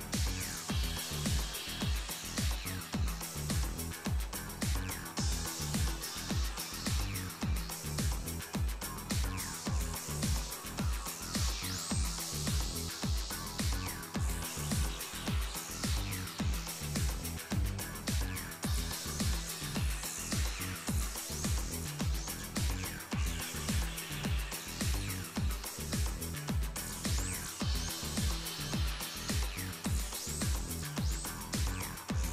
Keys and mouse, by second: 0.4-2.0 typing, 3.3 g, 7.4-13.4 drag, 13.8-15.3 typing, 14.1-15.2 drag, 18.4 z, 19.2 alt+f, 19.9-20.8 middle drag, 20.3 z, 21.3 z, 21.5 KP_7, 22.2-23.2 drag, 22.4 Tab, 22.6 z, 23.4 right click, 23.6 middle click, 24.3-25.7 middle drag, 25.7 click, 26.4 right click, 26.6 middle click, 27.9 right click, 28.0 click, 31.1-32.3 middle drag.